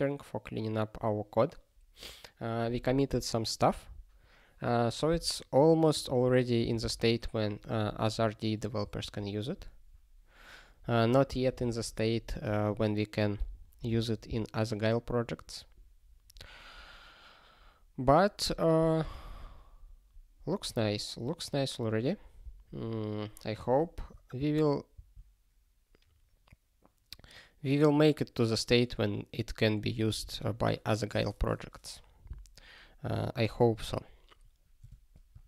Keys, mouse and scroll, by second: 5.9 click, 6.0 click, 6.6 ctrl+k, 7.0 ctrl+s, 8.8 ctrl+n, 24.3 ctrl+e, 24.9 ctrl+a, 34.8 Tab.